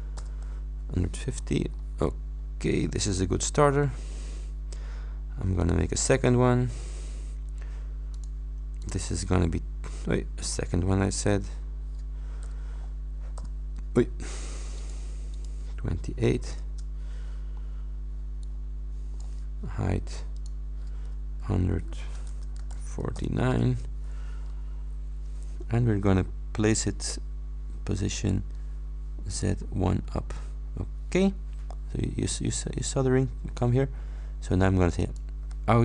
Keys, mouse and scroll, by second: 1.3-2.0 scroll down 4, 5.6 click, 8.2 click, 8.9 click, 11.2 click, 14.9 click, 15.4 click, 16.7 shift+Return, 17.7-19.5 drag, 20.5 click, 22.4 shift+BackSpace, 23.7 shift+Return, 24.5 scroll down 2, 26.8 click, 28.2 click, 29.4 click, 29.9 scroll up 2, 35.1 click.